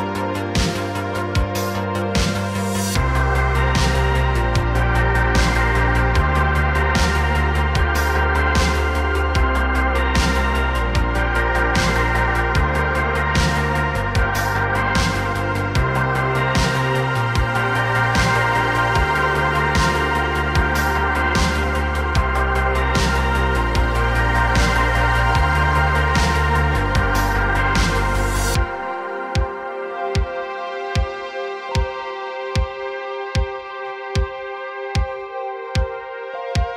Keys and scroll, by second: 3.3 s, 6.8 space, 7.1 s, 7.8 y, 11.9 s, 12.1 y, 14.2 space, 18.6 Return, 18.6 KP_0, 18.6 s, 23.6 space, 29.9 x, 31.2 x, 32.6 x, 34.1 x, 35.0 a, 35.6 KP_Decimal.